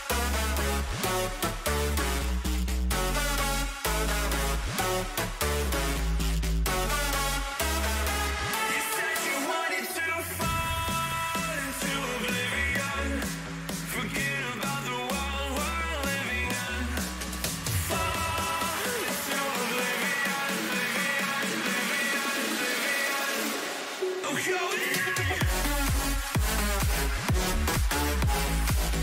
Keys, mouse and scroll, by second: 1.9 a, 2.1 a, 3.6 b, 5.1 g, 11.1-13.1 middle drag, 12.0 a, 13.1 b, 13.5 click, 14.5 g, 18.4 a, 18.9-23.5 middle drag, 23.5 ctrl+r, 25.4-28.5 middle drag, 25.7 a, 27.2 b, 28.5 g.